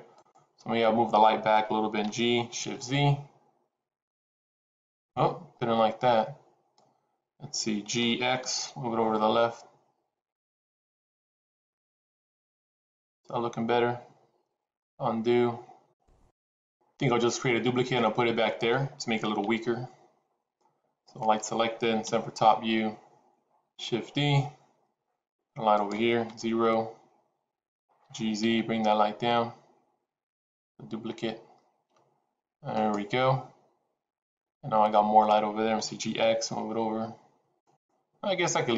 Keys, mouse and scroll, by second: 1.9 g, 7.9 g, 15.0 ctrl+z, 21.1 click, 22.1 KP_7, 23.9 shift+d, 26.3 KP_0, 28.2 g, 35.6 g.